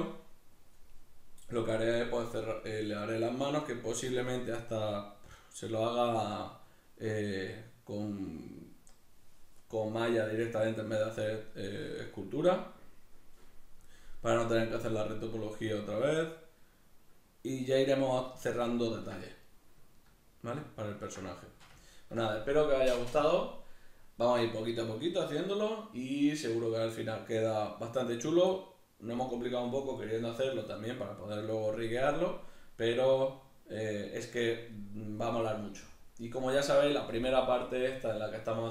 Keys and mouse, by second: 13.8-38.7 middle drag.